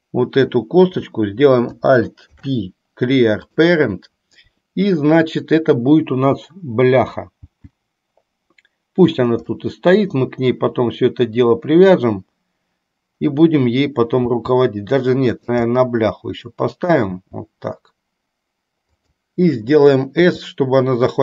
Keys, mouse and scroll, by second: 2.4 alt+p, 7.4 g, 9.6-12.1 middle drag, 14.4 g, 15.9-17.0 middle drag, 17.4 g, 20.3 s.